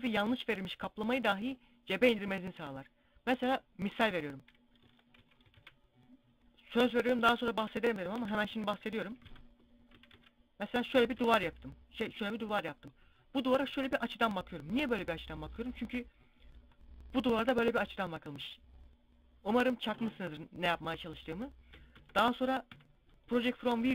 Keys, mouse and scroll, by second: 4.0-4.4 scroll down 1, 4.4 Tab, 4.8 x, 5.2 shift+a, 7.7 r, 10.5 click, 10.7 s, 11.6 click, 11.8-12.2 scroll down 2, 12.3 middle click, 21.4 Tab, 22.1 u, 23.7 scroll up 1.